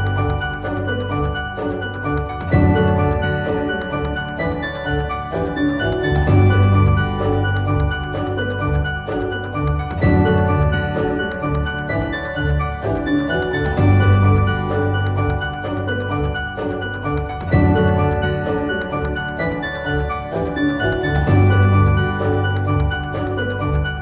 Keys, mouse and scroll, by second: 1.9-5.2 drag, 6.7 ctrl+g, 7.7 click, 13.7 click.